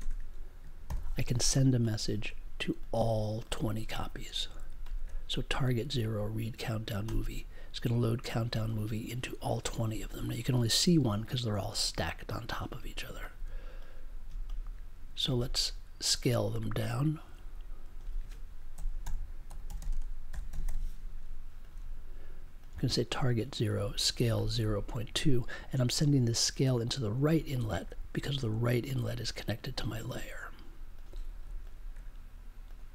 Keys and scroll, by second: 0.8 super+j, 18.7 s, 19.9-21.1 typing.